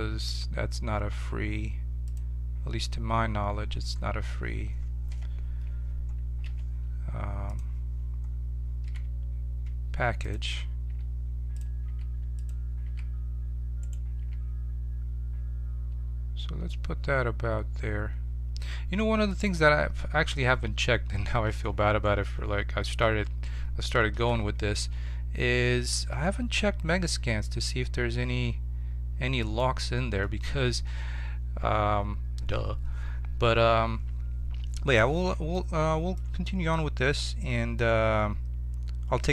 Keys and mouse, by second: 2.0-3.7 drag, 3.8-5.0 middle drag, 5.0 KP_7, 6.4 g, 8.8 s, 9.8 click, 11.0 g, 11.8 s, 12.8 s, 14.1 g, 21.7 middle click, 24.1 shift+d, 35.5-37.7 middle drag, 37.7-39.3 drag.